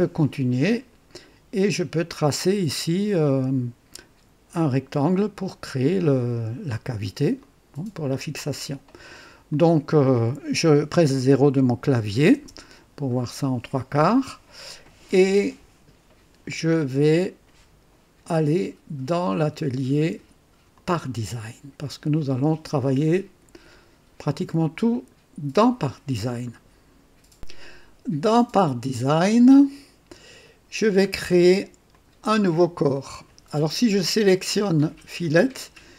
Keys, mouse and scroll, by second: 2.2-3.3 drag, 6.2-7.0 drag, 7.4-8.4 drag, 9.5-10.3 drag, 12.3 KP_0, 13.1-14.2 right drag, 20.7 click, 24.9 click, 29.0 click, 31.1 scroll down 2, 31.8 click, 32.6-32.9 scroll down 2, 35.2 click.